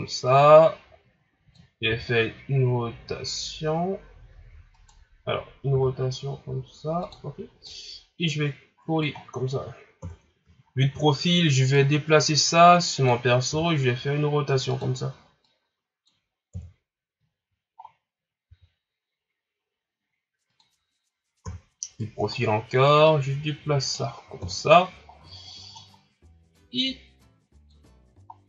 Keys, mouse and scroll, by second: 0.0-1.9 drag, 1.9 r, 5.8 r, 7.7-9.2 drag, 9.2-10.1 scroll down 1, 10.1 KP_3, 10.6-10.9 scroll down 2, 10.9 scroll up 3, 11.7-13.5 drag, 13.5 r, 15.5-16.5 drag, 16.5 KP_1, 17.4 scroll down 5, 17.8 scroll up 4, 18.5 s, 21.4 KP_3, 22.2 scroll down 1, 22.4 scroll up 4, 23.1-24.4 drag, 24.4 KP_1, 25.2 scroll down 7, 25.7 scroll up 6, 26.6-27.9 drag, 27.9-28.4 scroll down 4.